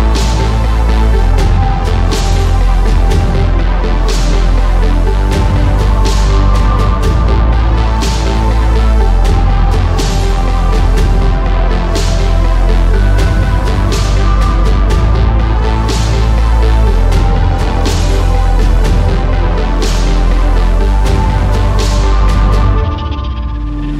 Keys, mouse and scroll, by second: 1.0 ctrl+r, 1.9 ctrl+r, 2.5 ctrl+r, 3.3 ctrl+r, 4.3 ctrl+r, 5.8 ctrl+r, 6.9 KP_3, 7.4 a, 7.5 a, 8.0 a, 10.3 KP_3, 10.7 r, 11.3 a, 11.5 r, 12.9 s, 14.1 click, 14.7 click, 15.9-17.2 middle drag, 17.2 Tab, 17.5 middle click, 19.2 middle click, 19.8-20.8 drag, 21.2 a, 22.5 shift+s.